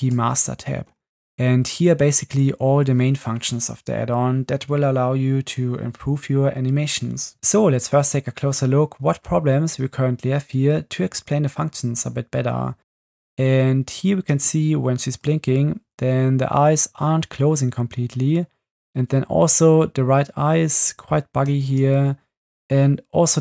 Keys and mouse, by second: 7.3 space, 12.9 space, 14.3 space, 15.2-15.8 drag, 17.4 middle click, 21.6 space.